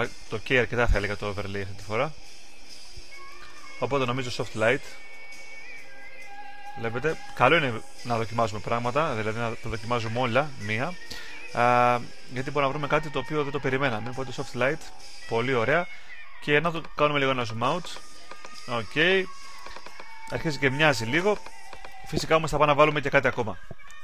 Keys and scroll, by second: 2.4-7.2 typing.